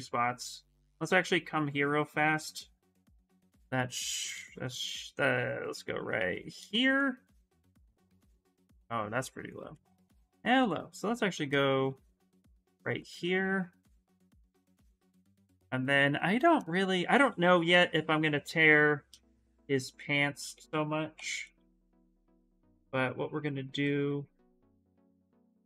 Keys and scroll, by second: 4.1 ctrl+z, 8.4 ctrl+z, 19.1 ctrl+z, 20.3 ctrl+z, 20.9 x, 23.6 ctrl+z.